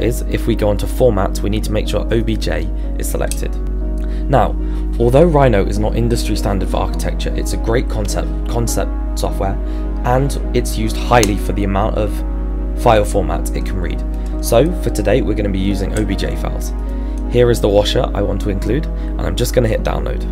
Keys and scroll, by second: 0.4 Return.